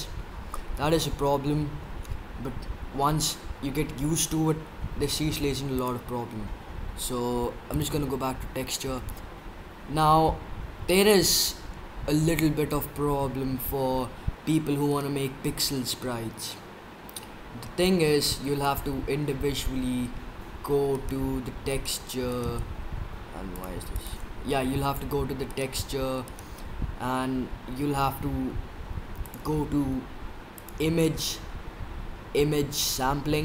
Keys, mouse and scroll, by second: 6.0-7.1 drag, 7.6-14.9 middle drag, 17.0-18.6 middle drag, 18.6-20.1 drag, 20.9-25.6 right drag, 23.6-26.3 drag, 26.3-28.1 right drag, 28.1 middle click, 28.8-32.5 drag, 32.7-33.4 drag.